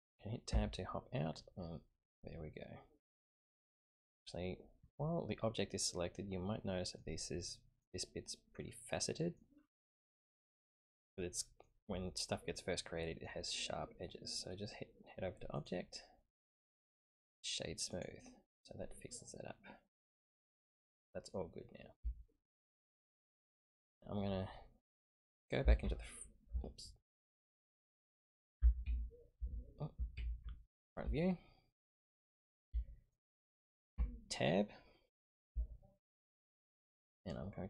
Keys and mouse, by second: 0.5 Tab, 1.2-3.1 middle drag, 6.1-7.0 middle drag, 7.3-7.8 middle drag, 8.6-9.4 middle drag, 10.7-11.7 middle drag, 12.1-13.3 middle drag, 15.5-18.0 drag, 19.1-21.3 middle drag, 21.1 typing, 22.2-22.8 shift+middle drag, 25.8 alt+KP_3, 27.6 click, 29.4 alt+KP_3, 30.2 ctrl+KP_3, 31.3-31.8 shift+middle drag, 32.8 shift+middle click, 34.0 Tab, 35.7 shift+middle click.